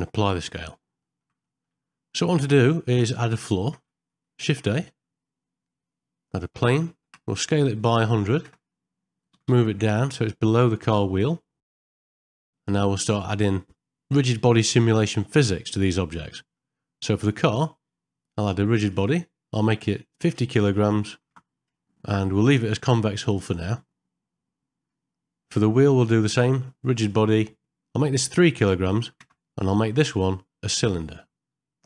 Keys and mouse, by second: 1.1 middle click, 1.5 middle click, 2.2 middle click, 3.4 ctrl+middle click, 4.5 shift+a, 6.8 middle click, 7.4 s, 11.3 middle click, 12.2 middle click, 12.4 middle click, 12.7 shift+middle click, 15.6 shift+middle click, 16.3 middle click, 17.0 click, 18.9 click, 20.2-21.8 drag, 28.0-29.3 drag, 30.1-31.8 drag.